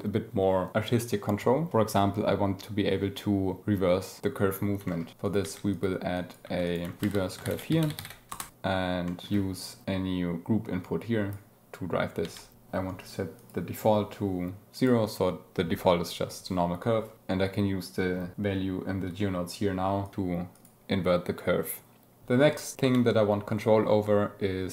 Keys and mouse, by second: 4.8 shift+click, 5.2 click, 5.3 g, 5.6 click, 6.1 click, 6.4 g, 6.6 drag, 6.9 shift+a, 9.0 click, 10.4-11.2 drag, 12.2 n, 13.3 click, 15.3 click, 17.1 click, 17.1 space, 20.0 click, 20.5 click, 22.2 space, 22.7 n.